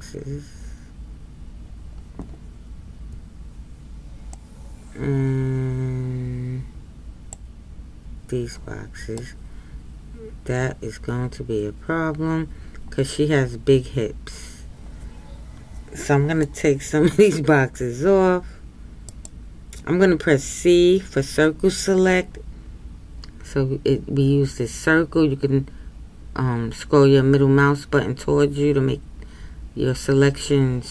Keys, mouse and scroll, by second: 9.2-12.3 middle drag.